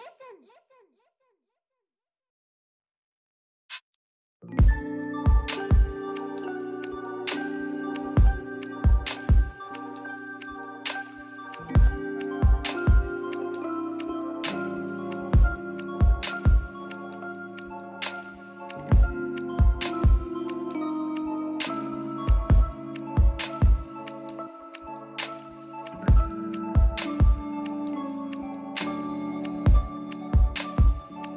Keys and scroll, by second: 2.3 ctrl+z, 13.7 ctrl+z, 15.3 ctrl+z, 16.5 ctrl+z, 17.4 ctrl+z, 29.2 [, 29.4 ], 29.4 [.